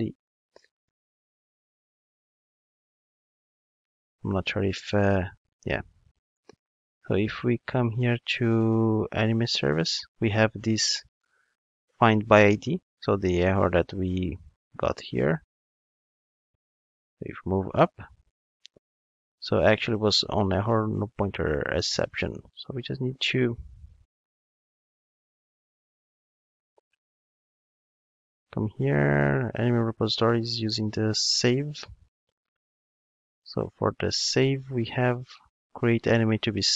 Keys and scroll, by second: 31.9 ctrl+Tab.